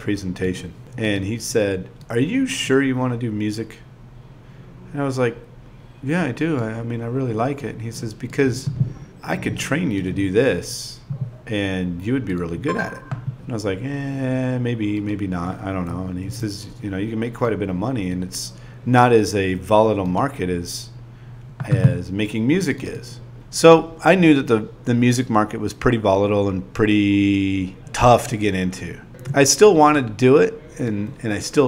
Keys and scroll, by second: 0.0-0.3 typing, 1.6 n, 2.1 n, 7.3-8.6 typing, 12.0 8, 12.7 ,, 18.5-21.4 typing, 23.0 v, 23.4 6, 24.9 ., 26.9 n, 27.2 a, 27.8 super+v, 30.2 5, 30.7 2.